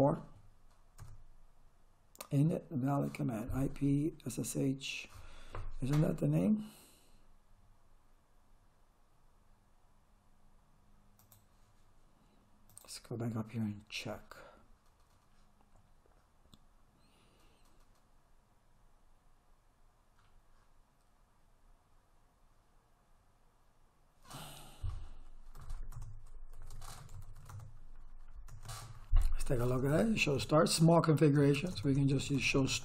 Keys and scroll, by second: 0.0-0.5 typing, 1.0 Return, 25.3-27.9 typing.